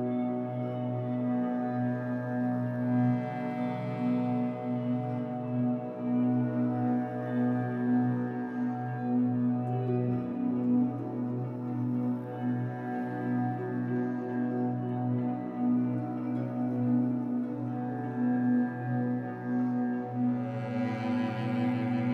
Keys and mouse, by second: 0.0-0.5 typing, 1.7 click, 2.8 click, 3.1-4.2 typing, 5.4-7.3 typing, 5.6 click, 10.2 F12, 15.5 click, 16.6 click, 18.5 click, 19.7 click.